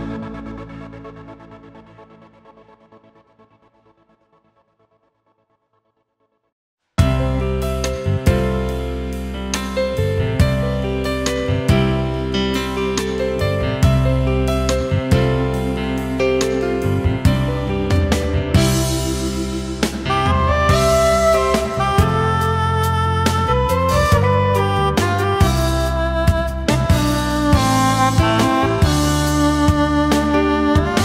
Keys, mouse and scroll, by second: 6.3 space, 18.1 shift+click.